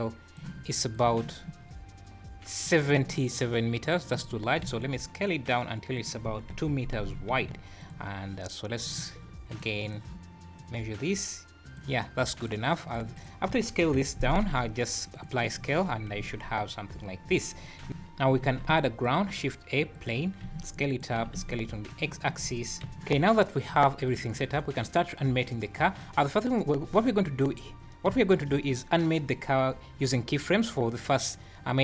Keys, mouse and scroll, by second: 22.9 x, 23.7 click, 24.1 click, 24.3 `, 25.0 click, 29.0 `, 30.7 `.